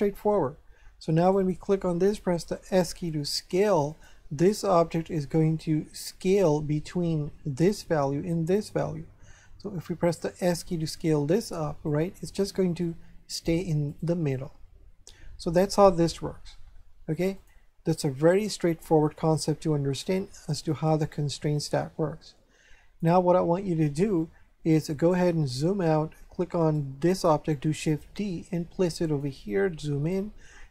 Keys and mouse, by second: 1.2 right click, 2.7 s, 3.9 click, 8.5 right click, 10.4 s, 11.8 click, 12.8 right click, 13.9 right click, 17.3 click, 20.7 click, 26.6 right click, 27.9 shift+d, 29.0 click, 30.0 shift+middle click.